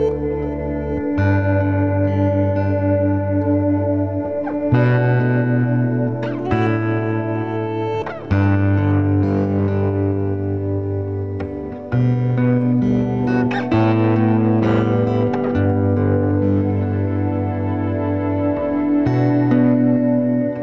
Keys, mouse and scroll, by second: 2.7-3.3 scroll up 2, 3.3 g, 4.9 g, 5.8 middle click, 6.2 scroll up 2, 6.4 middle click, 7.0 Tab, 7.8 scroll up 1, 8.0-9.0 shift+middle drag, 9.0-11.8 typing, 13.1 b, 14.6 BackSpace, 15.0 n, 15.8-17.8 scroll down 1, 17.8 click, 18.2-19.2 scroll up 2, 20.0-20.3 scroll down 1.